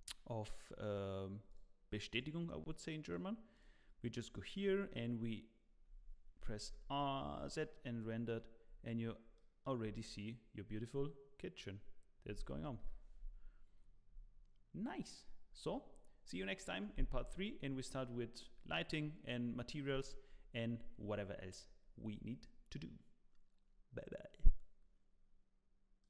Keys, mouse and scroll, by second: 0.9 click, 1.5 click, 3.7 click, 4.3 middle click, 6.3 z, 8.6-9.2 scroll up 3, 9.4 middle click, 9.8 scroll up 2, 12.8 z.